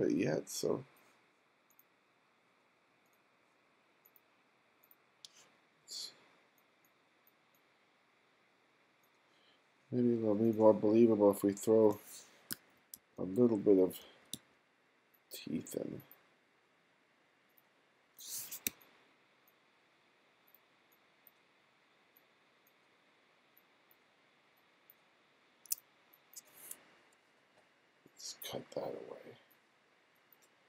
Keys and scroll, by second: 12.6 f, 13.0 g, 14.0 f, 14.4 g, 18.7 q.